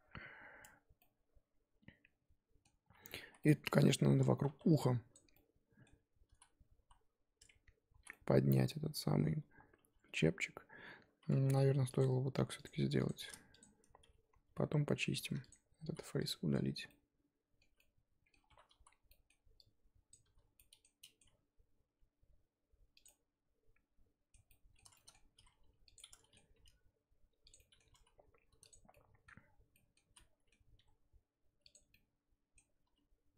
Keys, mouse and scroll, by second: 0.6 Tab, 1.0-3.3 middle drag, 3.3 z, 3.4 middle click, 3.7 scroll up 2, 4.4 1, 5.1 click, 5.3-6.3 middle drag, 6.3 z, 8.0 z, 8.1 middle click, 8.9-9.5 scroll up 1, 9.5 Tab, 9.8 Tab, 10.7-11.4 scroll down 1, 11.4 ctrl+r, 13.0 click, 13.6 shift+click, 14.4 j, 15.5 click, 16.2 x, 16.5 scroll down 2, 16.9 middle click, 17.7 z, 17.8 middle click, 18.5 1, 18.8 z, 19.1-20.1 middle drag, 20.1 click, 20.3 z, 20.5 middle click, 21.2 g, 23.1-25.3 middle drag, 25.3 r, 25.9 middle click, 26.5 g, 27.6 middle click, 28.0 z, 28.7 click, 28.9-30.0 middle drag, 30.0 z, 30.1 middle click, 30.7 g, 31.9 middle click, 32.9 z.